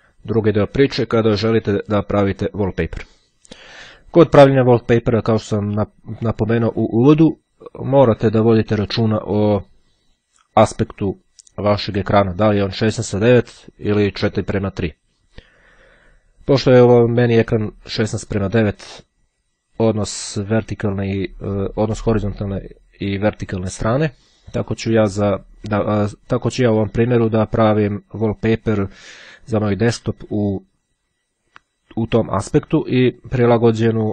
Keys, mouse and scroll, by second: 1.5-2.0 ctrl+scroll up 2.